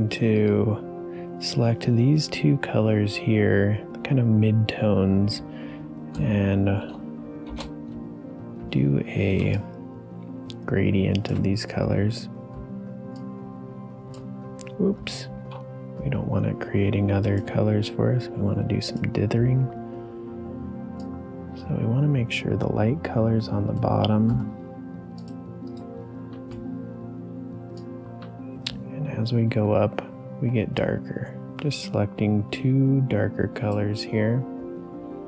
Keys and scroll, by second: 6.9 space, 7.4 shift+g, 9.4 space, 15.3 ctrl+z.